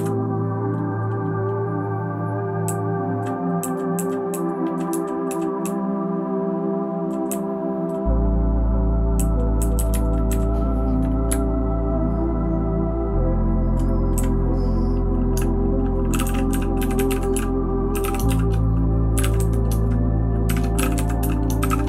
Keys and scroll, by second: 2.6 Down, 3.1 Down, 3.6 Down, 3.9 Down, 4.3 Down, 4.6 Down, 4.9 Down, 5.3 Down, 5.6-7.0 Down, 7.3 Down, 7.8 Down, 9.2 Down, 9.5 Down, 9.7 Down, 9.9 Down, 10.3 Down, 11.3 Right, 11.8-13.7 Right, 14.1 Down, 15.3 Tab, 15.8-21.8 typing.